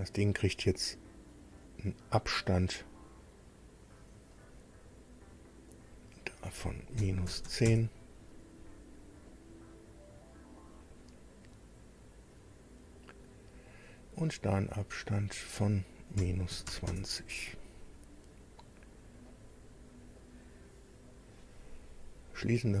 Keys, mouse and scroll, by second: 3.3 click, 4.3 click, 5.7 click, 6.9 KP_Subtract, 7.3 KP_1, 7.4 KP_0, 7.6 KP_Enter, 9.3-10.7 drag, 12.2 click, 13.6 click, 15.0 click, 16.1 KP_Subtract, 16.5 KP_2, 16.7 KP_0, 16.9 KP_Enter, 18.6 click, 20.2-21.2 drag, 22.4 click.